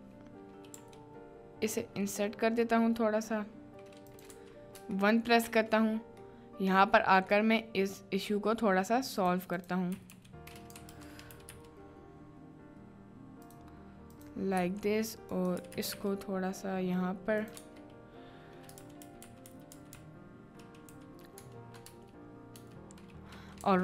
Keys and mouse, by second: 5.1 shift+middle click, 6.3 middle click, 7.3 middle click, 8.1 middle click, 9.9 h, 10.1 h, 10.9 ctrl+z, 11.3 g, 11.5 g, 13.4 click, 14.1 click, 14.5 g, 15.6 g, 15.8 g, 16.0 g, 17.6 Tab, 18.9 ctrl+z, 19.1 ctrl+z, 19.3 ctrl+z, 19.4 ctrl+z, 19.7 ctrl+z, 19.9 ctrl+z, 20.4 ctrl+z, 20.9 ctrl+z, 21.9 Tab, 22.6 Tab.